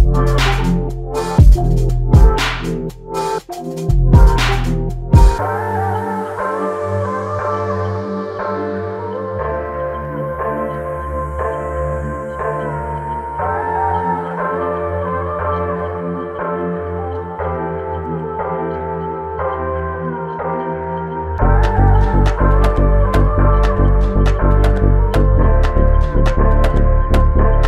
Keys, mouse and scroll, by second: 2.6 ctrl+Tab, 12.9 alt+click, 14.9-15.4 scroll down 1, 15.4-15.8 scroll up 1, 24.6 double click.